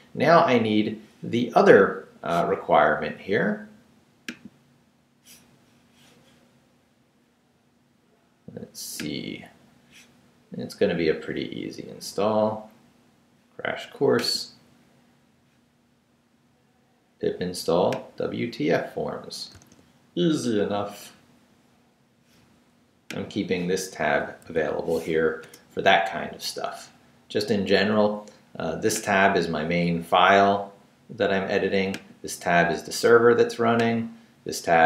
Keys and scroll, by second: 19.5 super+c, 24.4 super+v, 25.4 super+Return.